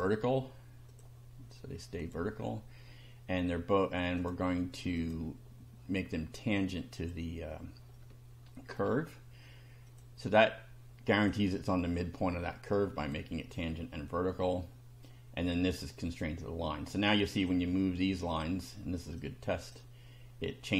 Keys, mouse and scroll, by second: 0.9 click, 2.0 click, 4.2 click, 5.0 click, 7.0 click, 7.9-8.9 shift+middle drag, 9.8 click, 11.2 click, 13.0 click, 14.1-14.6 shift+middle drag, 14.7-15.2 shift+middle drag, 17.2 click, 18.3 click, 19.2 click.